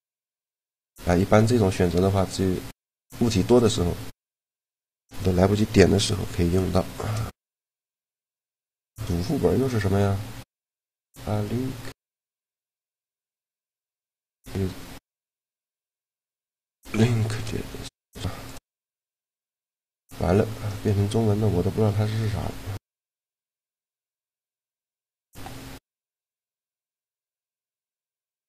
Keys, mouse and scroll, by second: 2.9 g, 4.1 a, 6.4 shift+l, 15.1 middle click, 15.7-17.4 right drag, 16.9 shift+l, 17.4 middle click, 19.2-20.8 right drag, 20.8-22.9 middle drag, 24.7 shift+l, 26.6-28.4 right drag.